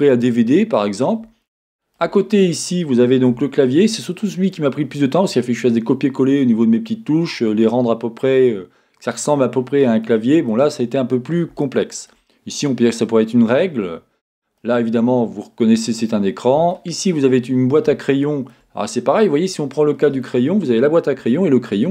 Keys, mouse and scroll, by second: 2.2-3.3 scroll up 2, 3.3 Tab, 4.9-7.1 scroll up 2, 7.1-7.5 scroll up 1, 10.9-11.6 scroll down 2, 13.9-14.6 scroll down 2, 17.6-21.9 scroll up 4.